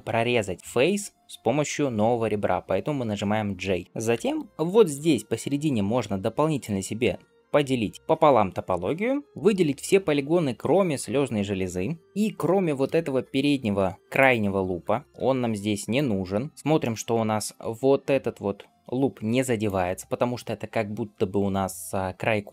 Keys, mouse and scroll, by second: 7.9-10.4 middle drag, 12.2 middle click, 12.2-12.7 scroll up 2, 14.0 alt+shift+click, 15.0 middle click, 15.8 alt+shift+click, 16.4 scroll down 1, 16.5 scroll up 2, 16.7 middle click, 17.5 d, 17.8-19.5 drag, 19.5 d, 22.4-22.5 scroll down 2, 22.4 d.